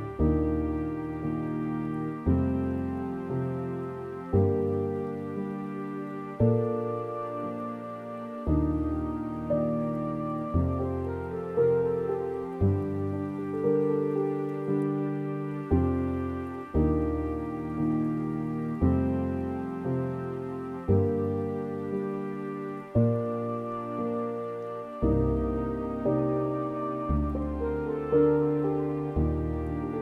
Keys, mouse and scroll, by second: 16.3-28.0 drag, 28.0-28.4 scroll down 4, 28.4-29.4 middle drag, 29.4 scroll down 3, 29.6-30.0 scroll up 8.